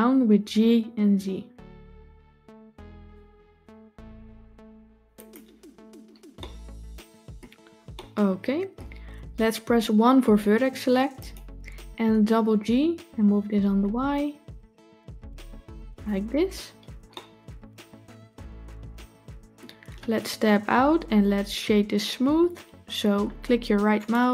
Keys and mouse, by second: 0.3 g, 6.2-7.2 middle drag, 7.8 shift+middle click, 11.0 click, 12.2 g, 17.0-19.4 middle drag, 20.3 Tab, 23.9-24.3 right drag.